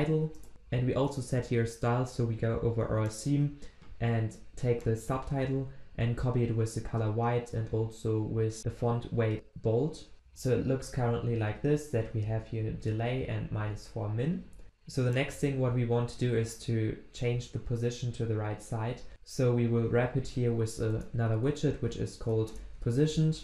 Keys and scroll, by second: 21.0 alt+Return.